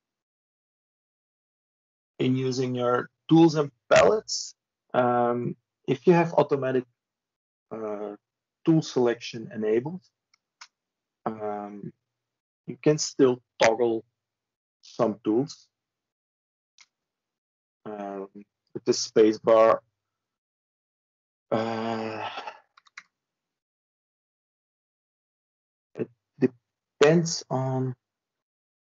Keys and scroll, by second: 22.6 Tab.